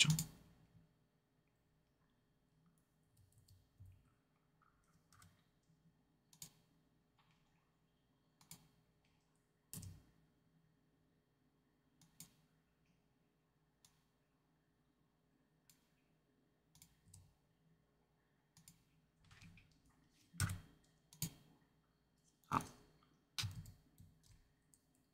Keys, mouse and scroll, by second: 0.0-3.3 drag, 3.0 a, 3.3 a, 5.1 i, 6.2-24.8 drag, 9.7 r, 17.0 r, 20.3 i.